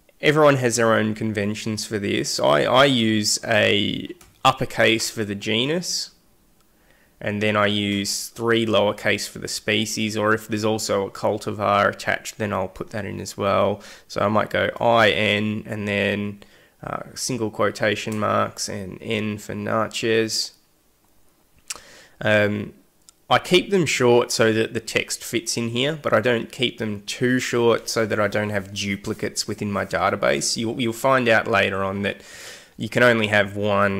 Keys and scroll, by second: 4.1 shift+l, 14.6 i, 14.9 n, 16.2 !, 18.0 shift+n, 18.9 !.